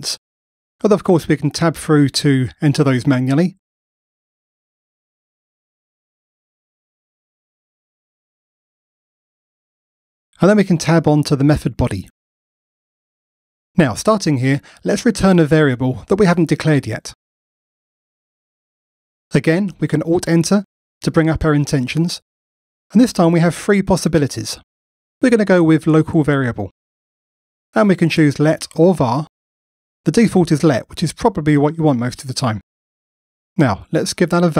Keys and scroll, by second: 0.2 Return, 2.1 Return, 13.9 alt+Up, 17.6 Escape, 20.6 alt+Return, 31.0 Return.